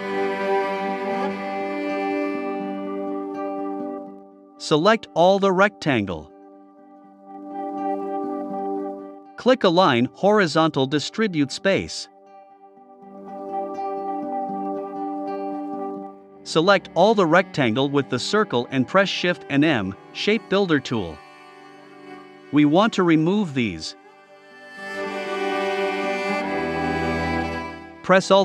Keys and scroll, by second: 0.3 shift+Left, 1.5 shift+Right.